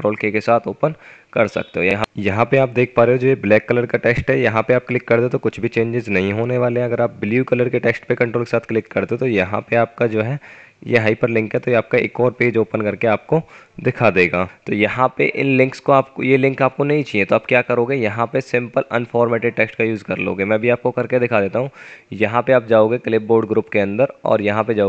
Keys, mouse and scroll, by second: 2.8 F10, 21.9 F9.